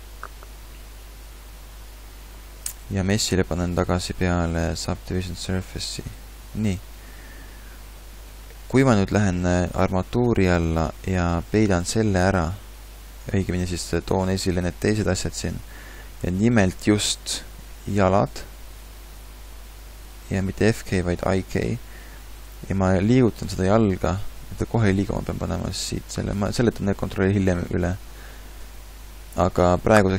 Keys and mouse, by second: 23.9 g, 28.6 KP_3.